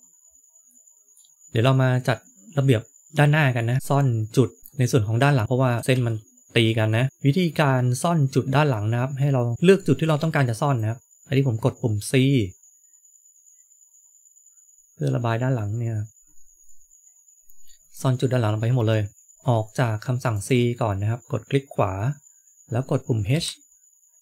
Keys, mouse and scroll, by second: 0.1-0.6 scroll down 3, 0.6 middle click, 1.3 scroll down 1, 3.5 middle click, 3.8 shift+middle click, 5.7 KP_1, 5.9 KP_3, 8.4-9.5 scroll up 1, 9.5 click, 9.5 c, 23.3 h.